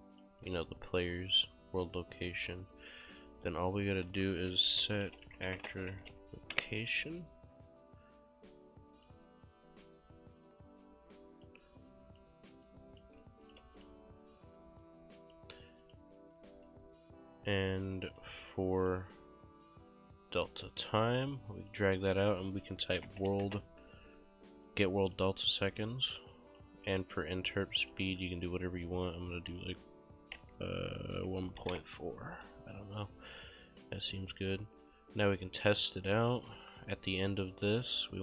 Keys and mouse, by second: 4.0 right click, 4.2-6.6 typing, 6.6 Return, 6.6 KP_Enter, 8.2 click, 9.7 `, 10.0 Escape, 10.5 click, 11.7 click, 13.5 shift+click, 13.7 q, 13.8 click, 16.4 right click, 18.0 right click, 18.7 click, 20.6 click, 22.6-23.9 typing, 25.1 click, 27.9 click, 28.8 1, 30.4-32.2 typing, 32.5 right click, 33.7 click, 34.9 right click.